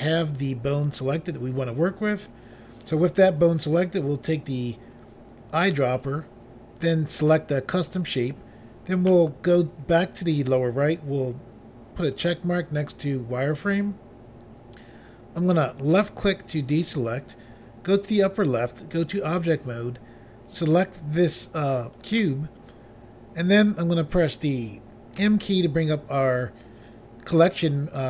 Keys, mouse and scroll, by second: 5.5 click, 5.7 click, 7.2 click, 7.3 click, 12.2 click, 12.3 click, 15.8 click, 16.0 click, 18.3 click, 18.4 click, 19.1 click, 19.2 click, 22.0 click, 25.2 m.